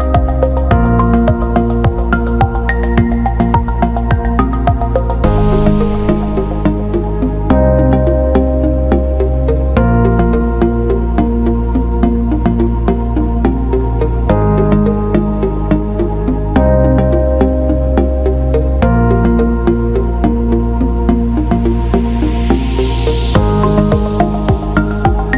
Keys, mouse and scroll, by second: 0.2 click, 4.8 click, 5.4 click, 7.0 alt+middle click, 7.5 click, 19.5-20.7 drag.